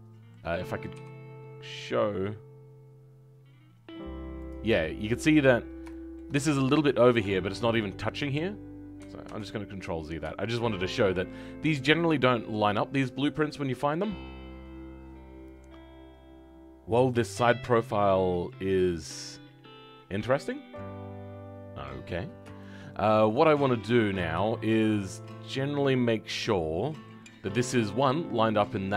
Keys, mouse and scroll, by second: 0.9 g, 5.8-9.2 shift+middle drag, 9.2 ctrl+z, 10.3-21.7 shift+middle drag, 21.7-22.5 scroll up 1, 22.5-28.9 shift+middle drag.